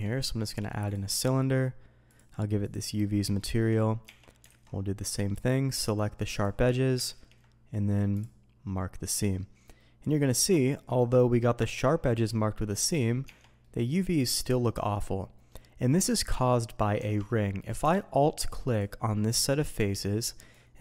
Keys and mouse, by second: 1.1 drag, 2.1 click, 3.0 drag, 3.5 shift+drag, 4.0 Tab, 4.6 alt+a, 5.3-6.4 drag, 7.0 ctrl+e, 10.0-10.5 drag, 12.9 click, 13.2 Tab, 13.6-14.0 drag, 14.0-15.5 middle drag, 16.1 shift+drag, 16.9 Tab, 20.5 click.